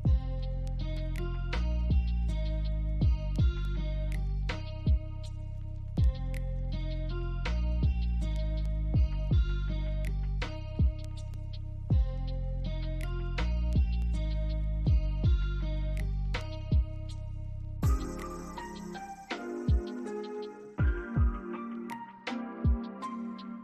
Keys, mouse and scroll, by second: 0.5 alt+click, 0.9 alt+middle click, 1.0 alt+scroll up 1, 1.5 shift+click, 2.1 right click, 3.2 scroll down 1, 3.5 alt+middle click, 4.0 scroll down 1, 4.3 alt+click, 5.9 alt+middle click, 6.9 shift+click, 7.3 alt+click, 10.8 ctrl+click, 12.3 ctrl+click, 13.8 alt+click, 15.4 double click, 15.7 alt+click, 21.2 middle click, 21.9-22.4 scroll up 1.